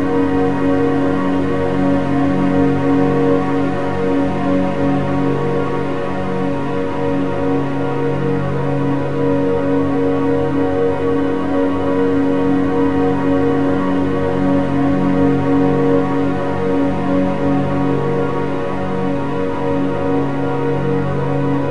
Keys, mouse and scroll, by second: 0.7 click, 1.8 click, 4.3-8.9 drag, 11.5 click, 12.2 a, 12.5 a, 13.9 click, 14.5 middle click, 15.2-16.0 scroll down 1, 16.0 click, 16.5 shift+a, 19.1 BackSpace.